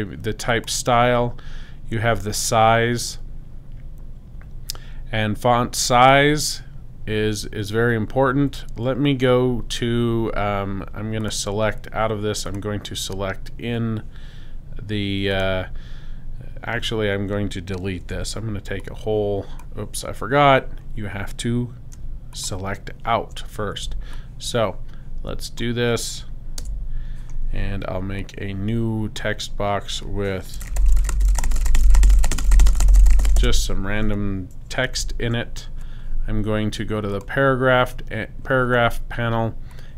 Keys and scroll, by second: 18.0 v, 26.6 super+BackSpace, 30.4-33.1 typing, 34.9 super+a.